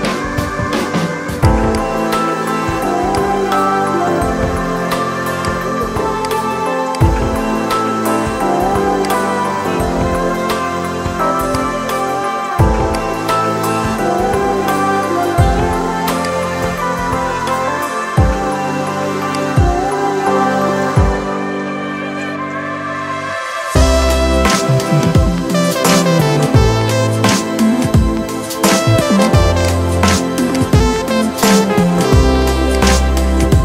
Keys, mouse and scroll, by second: 16.0-19.2 alt+drag, 24.4 click, 29.1 click, 29.4 right click, 30.4-33.6 drag.